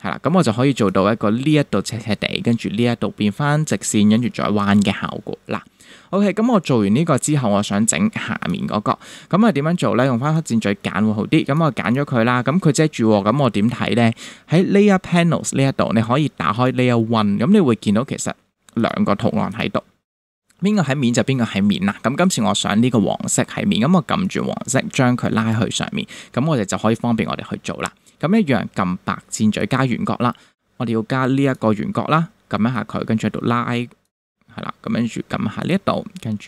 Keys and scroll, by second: 5.5 super+-.